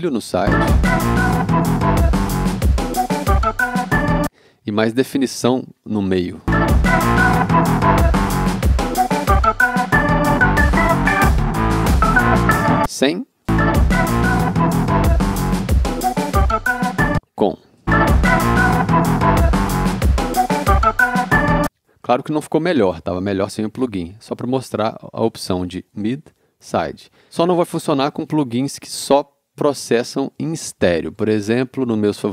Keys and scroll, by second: 0.4 space, 4.1 space, 6.5 space, 12.6 space, 17.0 space, 21.5 space, 27.1 c.